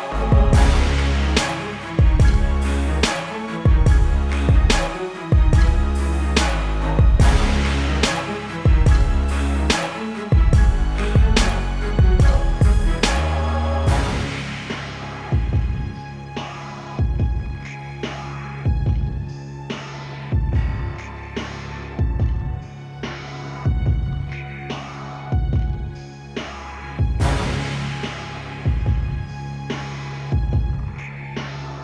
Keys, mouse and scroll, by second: 6.3 click, 8.2-8.9 scroll down 1, 8.9 click, 10.8 scroll down 1, 11.0 click, 11.3-13.1 typing, 12.3 click, 14.0 click, 15.7 ctrl+t, 16.2 click, 16.7 click, 19.2 Escape, 19.7 v, 19.9 click, 20.1 scroll up 1, 20.3 click, 21.5 typing, 22.1 click, 23.1-24.5 typing, 24.7 click, 29.5 b.